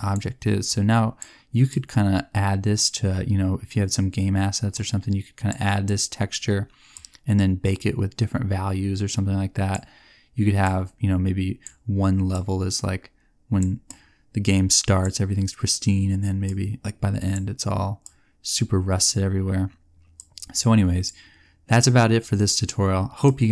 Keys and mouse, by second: 0.8 click.